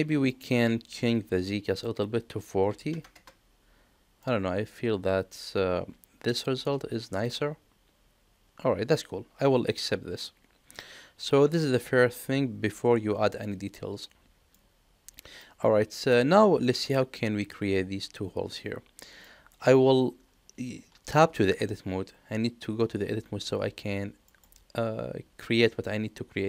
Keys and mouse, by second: 1.6-3.8 drag, 4.2-6.3 middle drag, 7.2-10.2 middle drag, 10.8-14.5 middle drag, 15.5 middle click, 16.9 middle click, 19.0 middle click, 24.3 middle click.